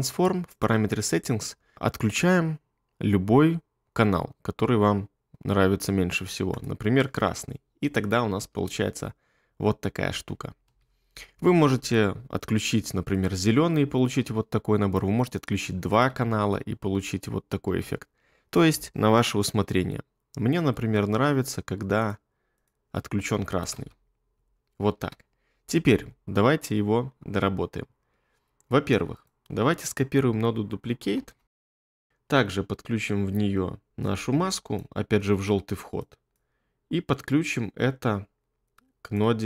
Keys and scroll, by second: 8.4 space, 10.6 space, 13.4 space, 14.2 space, 16.2 space, 17.6 space, 23.8 space, 24.9 space.